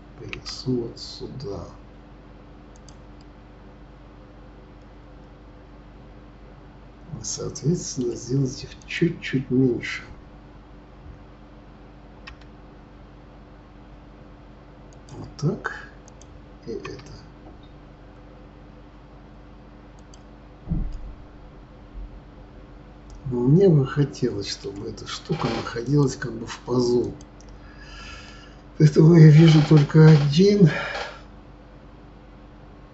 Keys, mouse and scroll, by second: 3.2-6.2 middle drag, 8.8 click, 12.3 s, 16.0 click, 16.8 s, 20.9-23.9 middle drag, 25.8 click, 27.0 click, 28.2-31.3 middle drag.